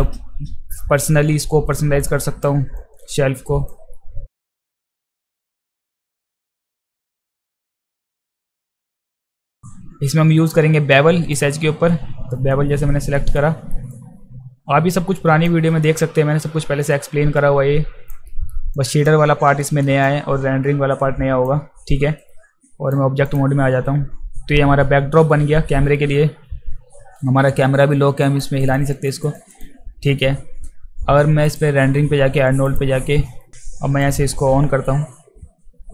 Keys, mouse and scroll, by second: 2.1-2.4 alt+right drag, 2.8 alt+click, 3.9 alt+middle click, 4.3 alt+right drag, 4.3 alt+middle click, 4.4 alt+click, 4.4 alt+middle click, 4.5 alt+middle click, 4.7 click, 4.9 alt+click, 4.9 click, 4.9 space, 5.0 click, 5.2 alt+right click, 5.2 alt+click, 5.3 click, 5.4 alt+middle click, 5.5 alt+right click, 5.6 click, 5.7 click, 5.8 middle click, 6.0 click, 6.1 middle click, 6.4 right click, 6.6 shift+click, 6.7 shift+click, 6.8 alt+click, 6.8 alt+middle click, 6.9 click, 7.1 alt+right click, 7.3 click, 7.4 right click, 7.6 r, 7.7 click, 8.3 click, 8.5 right click, 8.7 alt+click, 8.8 alt+right click, 8.8 alt+click, 8.9 alt+right click, 8.9 right click, 9.2 click, 9.2 alt+click, 9.4 drag, 9.5 alt+drag, 9.5 alt+middle click, 9.6-11.3 shift+right drag, 13.1 alt+middle click, 13.9-15.4 drag, 15.8 alt+middle click, 16.4-18.1 alt+drag, 18.2 alt+middle click, 18.7 alt+click, 19.6 alt+middle click, 20.0-21.4 alt+drag, 22.2-22.9 right drag, 23.3 click, 28.2 alt+click, 28.6 alt+click, 28.9 alt+click, 29.2 alt+click, 29.5 alt+click, 31.5 click, 32.6 click, 34.0 click.